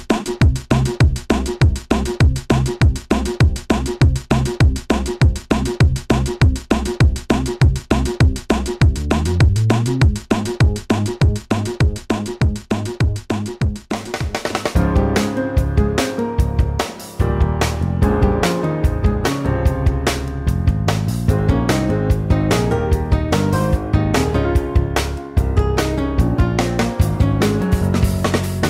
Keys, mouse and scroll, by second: 6.6-8.6 typing.